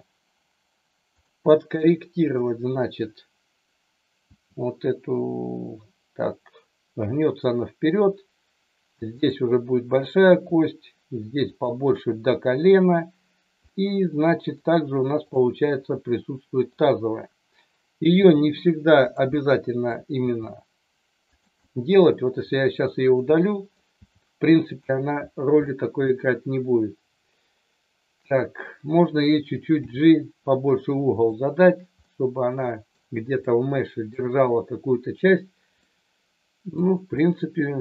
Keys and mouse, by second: 4.3 g, 9.1 click, 9.8 click, 10.3 g, 11.5 click, 13.7 middle click, 15.2 click, 15.8 middle click, 18.2 g, 19.0 click, 19.4 middle click, 20.1 g, 21.2 click, 21.7-23.0 middle drag, 23.4 middle click, 24.0 g, 24.6 click, 25.6 middle click, 29.7 g, 32.0 middle click, 33.4 middle click, 35.8 middle click, 37.2-37.8 middle drag.